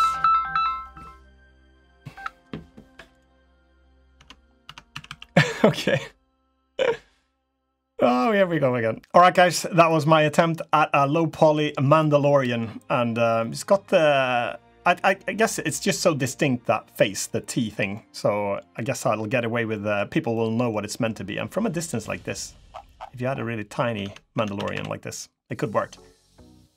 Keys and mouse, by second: 3.2 drag, 3.9 Tab, 4.4 Tab, 4.7 a, 4.8 a, 5.1-6.9 drag, 7.7-8.1 drag, 8.7 drag, 11.9 drag, 12.1 middle drag, 13.1 middle drag, 14.6 middle drag, 16.8 click, 17.7 drag, 19.6 click, 20.1-20.5 drag, 21.5-22.1 drag, 23.8 Tab, 24.1 Tab, 24.3 a, 24.5 a, 25.2 click, 26.6 3.